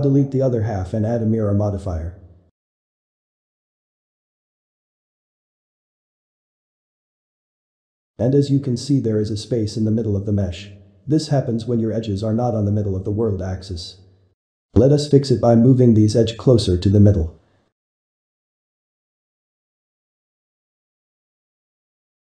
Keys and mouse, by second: 1.8-2.3 ctrl+middle drag, 2.3 x, 3.3 z, 4.7-5.9 shift+middle drag, 5.9 Tab, 6.9 alt+shift+x, 7.5-9.0 middle drag, 9.0 Tab, 9.5-10.7 ctrl+middle drag, 10.7 click, 12.3 `, 13.0 shift+middle click, 13.7 z, 14.7 click, 17.6-18.2 drag, 18.2 g, 19.4 z, 20.5-22.3 ctrl+middle drag.